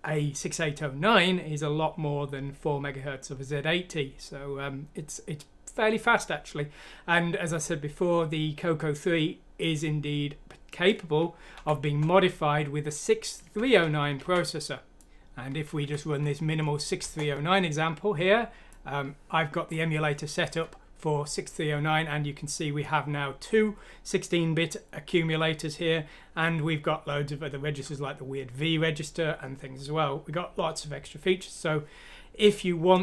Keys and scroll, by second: 11.5 F6, 13.4 Escape, 14.2 alt+f, 15.8 F6, 17.0 Return.